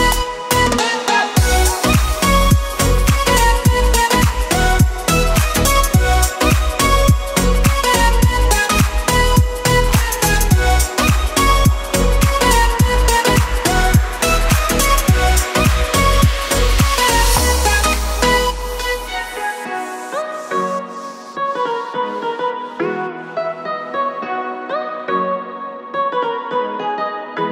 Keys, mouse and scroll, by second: 5.5 click, 6.8 click, 7.3 Tab, 8.1-9.6 scroll up 4, 10.3 click, 11.1 click, 13.3 s, 16.2 click, 18.5 click, 19.1-20.2 scroll down 5, 19.6 click, 21.0 e, 24.9 click, 25.3-25.9 scroll up 3, 25.9 KP_Decimal, 26.7-27.5 scroll up 2.